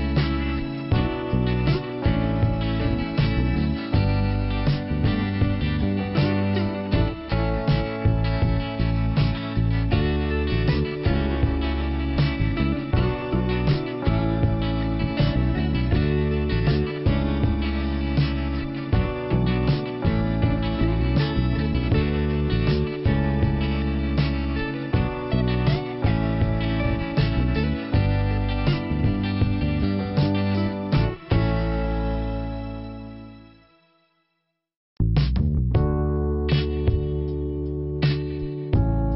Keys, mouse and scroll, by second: 0.4 scroll down 1, 2.6-3.0 scroll up 2, 3.0-3.7 scroll down 1, 3.7 right click, 4.0 scroll down 1, 6.4 middle click, 11.5 click, 12.7 click, 15.0-15.5 scroll up 1, 15.5-16.0 scroll down 1, 21.4 click, 23.2 click, 25.2 scroll down 1, 26.4 scroll down 1, 28.9 click, 34.5 click, 35.7 click, 37.4 click, 37.9 click.